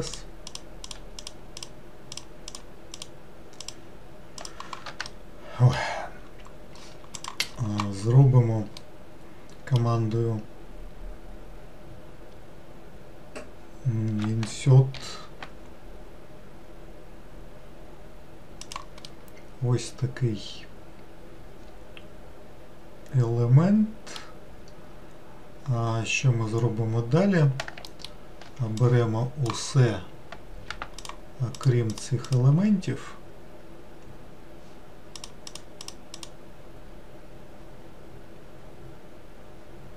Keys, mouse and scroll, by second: 0.1 shift+click, 0.5 shift+click, 0.9 shift+click, 1.6 shift+click, 2.1 shift+click, 2.5 shift+click, 3.0 shift+click, 3.6 shift+click, 4.4 shift+click, 5.1-8.1 middle drag, 8.8-11.9 middle drag, 19.1-22.1 middle drag, 27.9 alt+middle click, 28.8 click, 31.0 shift+click, 31.6 shift+click, 31.9 shift+click, 32.3 shift+click, 35.2 shift+click, 35.5 shift+click, 36.2 shift+click.